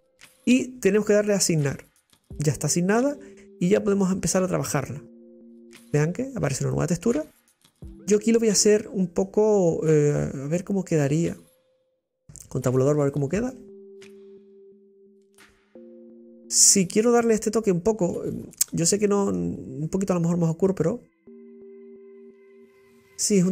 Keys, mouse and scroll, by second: 1.5-9.3 drag, 11.0-12.3 middle drag, 12.3 Tab, 12.6 scroll down 2, 13.1-14.0 shift+middle drag, 14.0 right click, 14.5-17.4 middle drag, 21.7-23.3 drag, 23.3-23.5 middle drag.